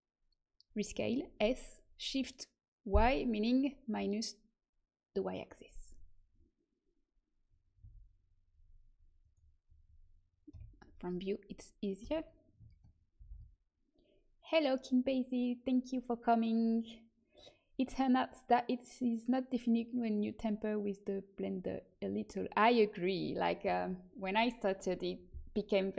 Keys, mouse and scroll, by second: 10.5 KP_1, 12.0 s.